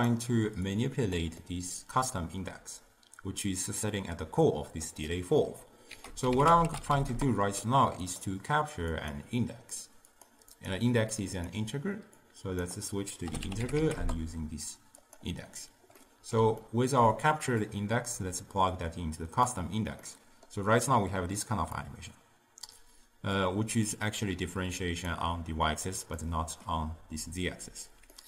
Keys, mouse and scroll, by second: 0.7 click, 1.5-4.5 middle drag, 5.1 middle click, 6.0 ctrl+a, 9.0 click, 10.6-15.2 drag, 16.1-17.8 middle drag, 17.8 click, 20.1-21.9 middle drag, 21.9-24.9 drag, 26.3-28.2 middle drag.